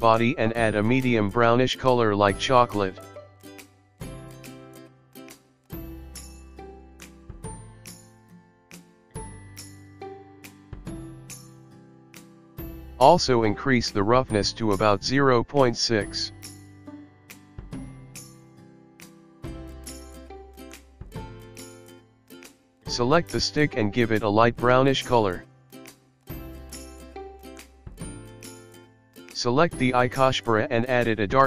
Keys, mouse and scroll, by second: 0.1 click, 0.8 click, 2.6 click, 3.9 click, 11.9 click, 15.6 click, 19.2 click, 21.2 click, 22.5 click, 23.1 click, 24.3 click, 27.1 click, 27.3 click, 27.5 click, 28.1 click, 29.2 click, 29.7 click, 30.9 click.